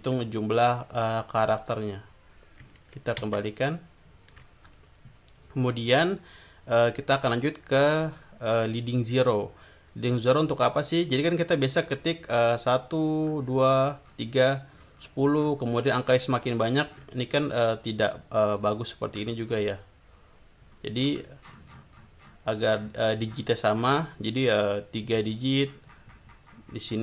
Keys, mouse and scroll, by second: 0.6 click, 1.6 click, 3.2 ctrl+z, 7.0 scroll up 2, 8.1 click, 10.7 scroll down 2, 11.2-11.5 scroll up 2, 13.2 scroll down 2, 14.1-14.9 scroll down 2, 14.9-17.5 scroll down 13, 17.5-18.3 scroll up 2, 18.5 click, 19.5-21.3 scroll up 5, 21.4-23.6 scroll down 7, 23.8 scroll up 2, 25.7-27.0 scroll up 4.